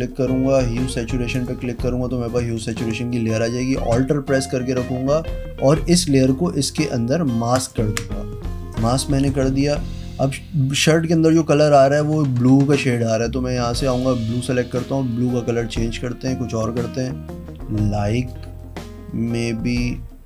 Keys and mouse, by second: 1.3 click, 7.5 alt+click, 8.6 click, 12.6 click, 13.8 click, 14.7 click.